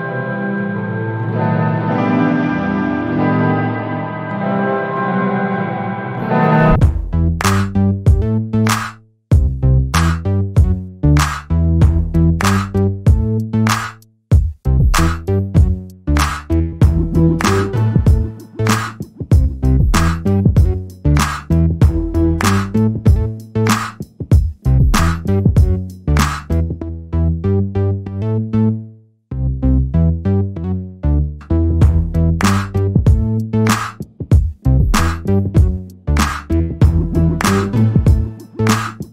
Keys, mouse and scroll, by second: 0.2 alt+click, 0.7-1.3 scroll up 1, 1.3 alt+click, 3.3-4.1 scroll up 1, 4.1 click, 4.3 right click, 5.0 click, 5.3-5.7 scroll down 1, 6.5 alt+middle click, 6.9 alt+click, 7.3 alt+middle click, 7.7 alt+click, 9.1-9.6 scroll up 1, 9.6 alt+click, 10.6 alt+middle click, 10.9 alt+click, 11.7 alt+middle click, 12.0 alt+click, 12.9-13.7 scroll up 1, 13.7 click, 14.0 double click, 14.3 scroll down 1, 14.6 alt+click, 16.9-17.7 scroll down 2, 17.7 alt+click, 20.0 scroll up 1, 20.5 alt+click, 22.4 alt+middle click, 22.8 alt+click, 27.5 alt+middle click, 28.1 alt+click, 28.6 alt+middle click, 29.2 alt+click, 30.3 alt+middle click, 33.9 alt+middle click, 34.9 alt+click.